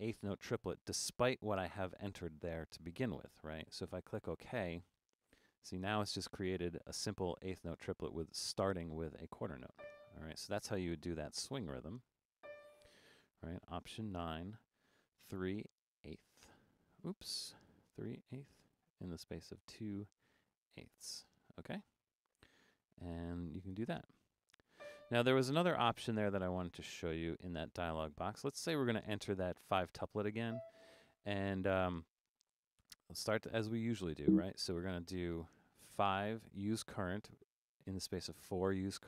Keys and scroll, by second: 7.5 4, 11.4 5, 14.2 alt+9, 23.7 4, 32.8 alt+9, 36.3 5, 38.5 4.